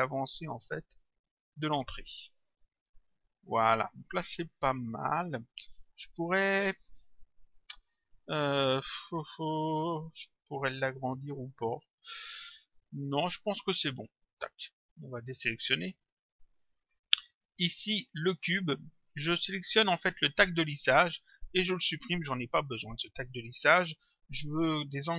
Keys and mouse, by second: 0.0 click, 2.6 click, 14.3 click, 15.6 click, 18.2 click, 20.0 click, 22.3 Delete.